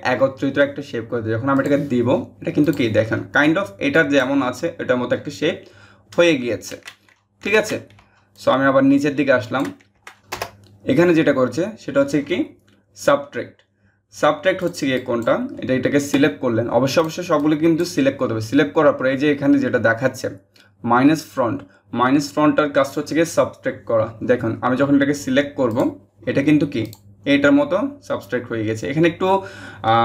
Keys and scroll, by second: 6.3 ctrl+z, 7.1 ctrl+z, 10.2 BackSpace.